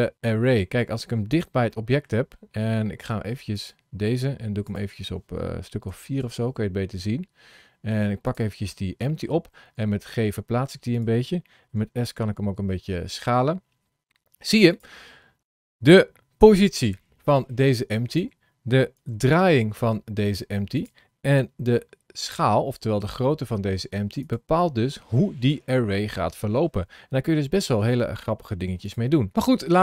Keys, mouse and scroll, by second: 1.5 middle click, 3.3 click, 4.6 click, 7.2-7.6 scroll up 5, 8.0 click, 8.5 middle click, 9.5 g, 11.6 s, 15.0-15.4 scroll up 2, 15.8 scroll down 1, 16.3 g, 18.8 r, 21.2 s, 24.4 middle click, 28.6 click, 29.4-29.8 scroll down 4.